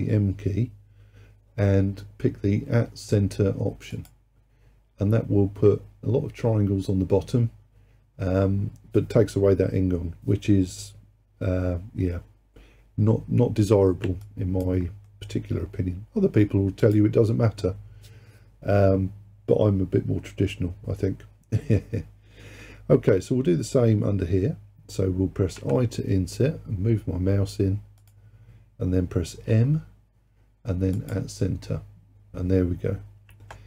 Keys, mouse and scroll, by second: 14.3 alt+click, 15.1-16.9 middle drag, 16.9 click, 25.6 i, 29.5 m.